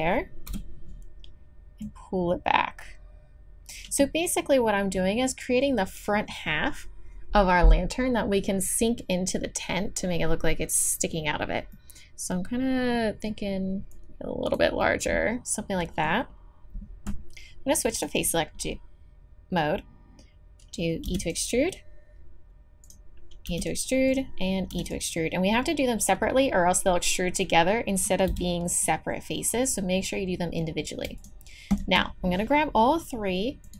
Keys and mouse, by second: 0.5 KP_7, 1.8-3.8 drag, 11.7-13.9 middle drag, 13.9 click, 14.8 middle click, 15.6-16.9 drag, 18.0-19.9 drag, 21.1 e, 22.8-25.9 drag, 23.5 e, 24.7 e, 28.3 g, 31.2-33.7 drag.